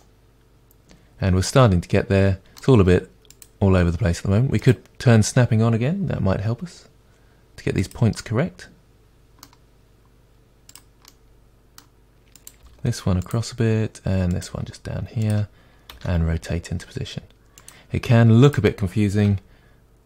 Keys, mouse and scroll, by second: 0.0-3.4 middle drag, 3.4 click, 4.6 click, 6.2 g, 8.2-10.7 middle drag, 8.4 click, 10.7 click, 11.1-12.4 middle drag, 12.4 click, 12.7 g, 14.4 click, 14.5 g, 16.0 r, 17.7 click, 19.3 g.